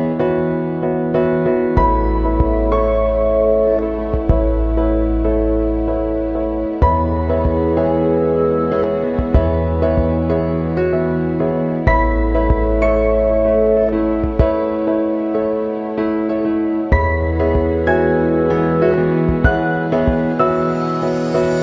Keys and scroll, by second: 1.2 ctrl+=, 10.8 ctrl+=.